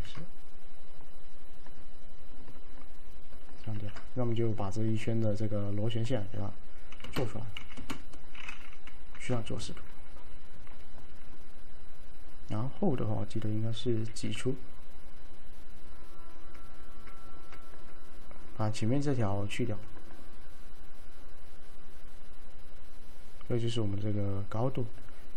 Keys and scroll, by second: 0.0 ctrl+x, 3.8 ctrl+x, 7.1 l, 7.7 f, 9.2 l, 14.2 alt+q, 17.9 alt+q.